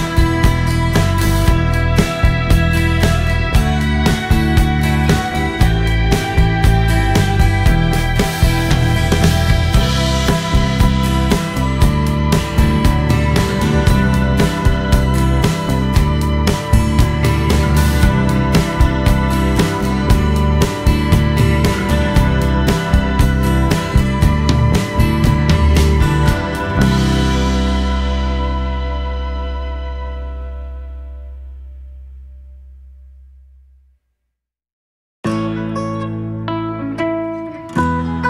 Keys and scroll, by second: 3.2 Return, 3.7 o, 5.2 space, 6.4 t, 13.8-15.3 typing, 14.5 Escape, 17.5 space, 18.5 Escape, 21.0 space, 21.4 Escape, 25.9 space, 26.2 b, 27.8 space, 37.5 typing.